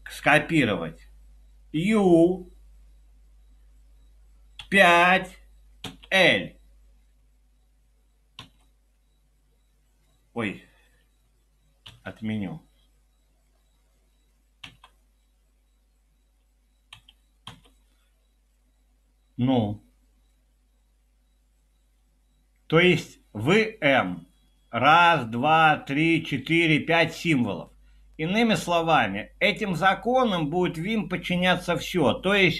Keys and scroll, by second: 1.8 typing, 4.7 typing, 5.9 typing, 8.4 typing, 11.9 u, 14.7 o, 16.9 Escape, 17.5 p.